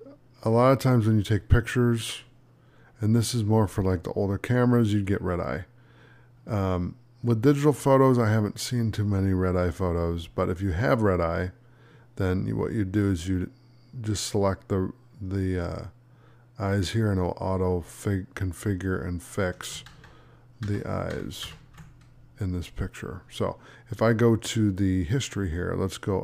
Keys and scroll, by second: 19.8 ctrl+z.